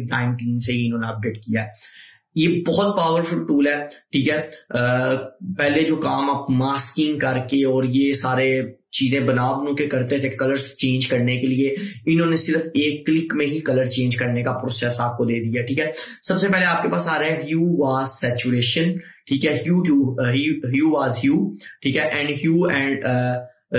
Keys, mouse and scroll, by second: 21.5 scroll down 1.